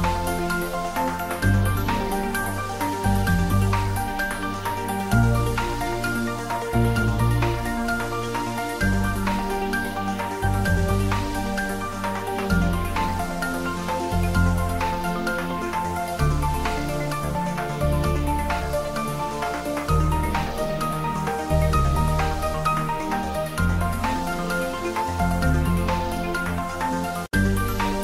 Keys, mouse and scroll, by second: 0.8 s, 3.4 click, 4.0 g, 4.3 z, 5.4 z, 6.3 click, 7.7 g, 7.9 z, 11.0 click, 15.4 click, 18.0-18.7 typing, 19.0 Return, 21.7 click, 25.7-26.2 typing, 27.2 Return.